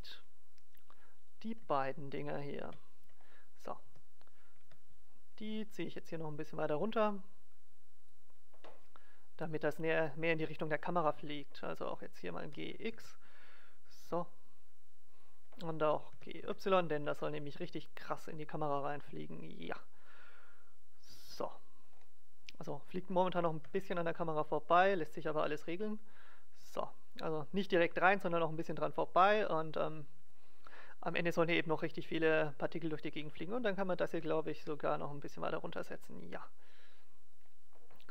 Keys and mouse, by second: 1.2-3.6 right drag, 2.6 KP_0, 3.8 g, 8.2-9.7 drag, 9.7-12.7 middle drag, 12.4 g, 15.2-17.1 drag, 16.1 g, 21.5-22.5 drag, 22.5-24.5 middle drag, 23.3 g, 30.4-32.2 drag, 32.8-34.8 right drag, 34.0 g, 37.4-38.1 drag.